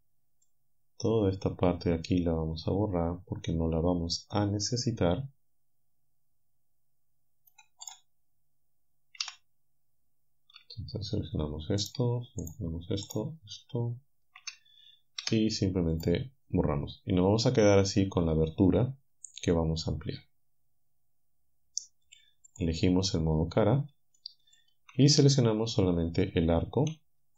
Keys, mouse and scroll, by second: 0.5-7.7 right drag, 7.9 right click, 9.2 z, 11.9 alt+shift+right click, 12.5 alt+shift+right click, 13.1 alt+shift+right click, 15.3 Delete, 16.0 right click, 20.6 scroll down 1, 22.5 click, 24.2 shift+click.